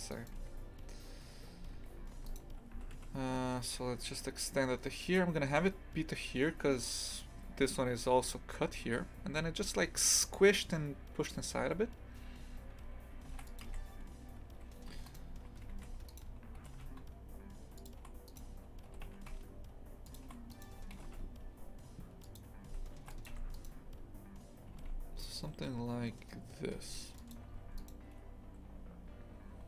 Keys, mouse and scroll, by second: 0.1 right click, 0.3 2, 2.1 2, 2.3 right click, 2.7 s, 13.3 ctrl+r, 14.6 2, 14.9 a, 15.1 right click, 15.7 1, 16.1 right click, 16.6 g, 18.3 right click, 18.9 g, 20.5 right click, 20.9 g, 23.0 ctrl+r, 23.5 right click, 24.7 g, 27.5 2, 27.8 right click.